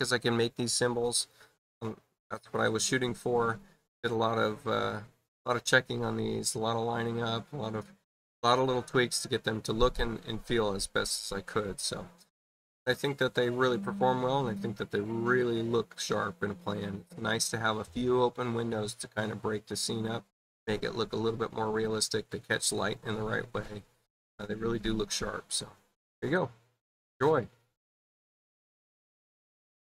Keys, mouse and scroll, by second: 29.1 shift+F1.